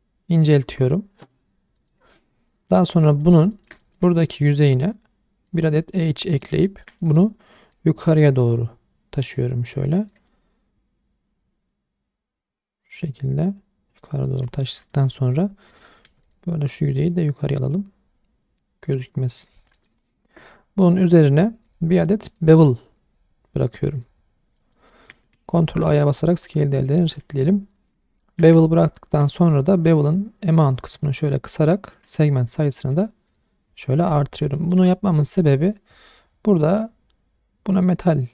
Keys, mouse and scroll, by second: 1.8 click, 2.1 middle click, 2.5 shift+middle click, 2.9-3.2 scroll up 1, 3.2 middle click, 3.5 shift+middle click, 3.8 middle click, 4.3 ctrl+r, 5.8 right click, 6.3 middle click, 6.7 shift+middle click, 7.0 middle click, 7.7 click, 10.3-14.4 middle drag, 14.6 shift+middle click, 14.9 middle click, 15.1-15.7 scroll up 1, 15.7 click, 16.1 3, 16.2 click, 17.1 click, 19.7 middle click, 19.9 shift+scroll down 1, 20.0 shift+middle click, 20.4 Tab, 21.7 click, 22.3 click, 22.7-24.0 drag, 24.6 middle click, 24.9 shift+middle drag, 25.6 ctrl+a, 27.0 shift+middle drag, 27.3 middle click, 27.6-27.9 scroll up 1, 28.0-28.4 shift+middle drag, 28.6-29.1 ctrl+middle drag, 30.0-31.9 shift+drag, 32.9 click, 33.3 click, 33.7-34.1 scroll down 1, 34.1 middle drag, 34.5 shift+middle drag, 34.9-35.2 scroll up 1, 35.2 middle click, 35.5 scroll up 2, 36.7-38.3 right drag.